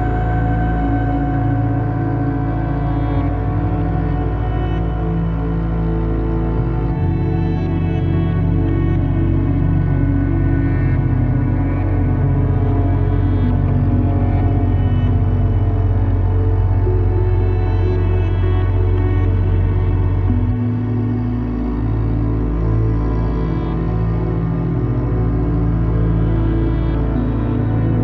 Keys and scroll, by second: 7.1 `, 18.2 `.